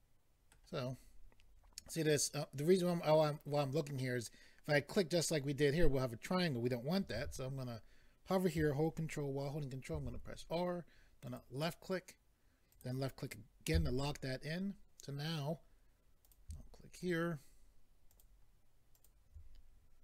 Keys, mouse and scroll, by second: 7.1 a, 9.9 ctrl+r, 11.3 click, 12.7 click, 13.7 a, 16.2 click, 17.0 shift+click, 18.1 shift+click, 18.9 shift+click.